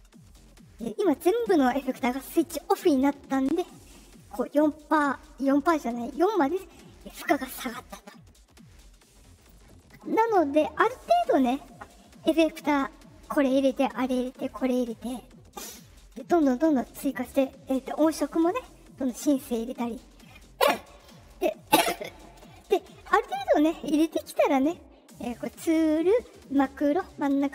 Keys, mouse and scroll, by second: 9.3 click, 25.3 click, 26.4 click.